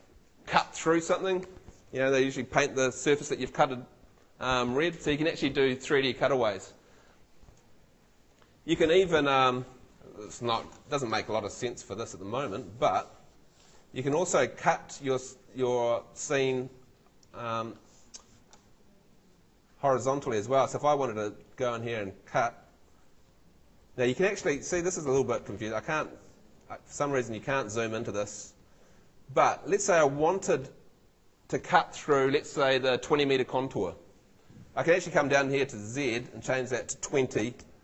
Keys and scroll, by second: 25.1 Home, 37.1-37.8 typing.